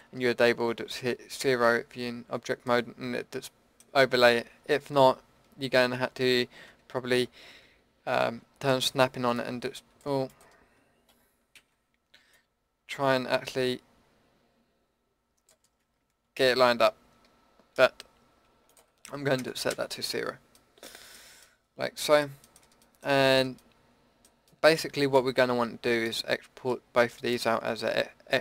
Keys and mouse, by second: 5.8 ctrl+z, 6.7 Tab, 8.2 shift+Tab, 9.4-11.1 drag, 11.1 ctrl+z, 11.6 ctrl+z, 12.3 click, 14.2-15.5 middle drag, 16.3 ctrl+z, 17.3 Tab, 26.0-28.4 drag.